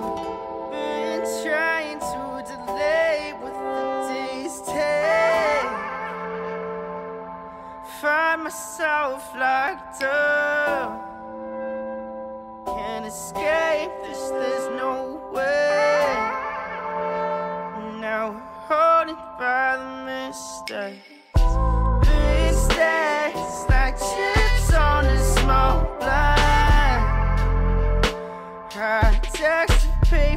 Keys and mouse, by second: 1.3 r, 3.5 r, 5.0 shift+d, 5.5 r, 8.2 middle drag, 8.6 r, 10.8 middle click, 11.2 click, 11.5 click, 12.1 click, 12.4-15.1 drag, 15.5 click, 15.9-17.4 drag, 17.7 click, 18.9 click, 19.4-20.6 drag, 23.6-24.7 drag, 25.7 click, 26.2 shift+middle click, 27.0 click, 27.4 click, 28.0-29.0 drag, 28.4 0, 30.0 click.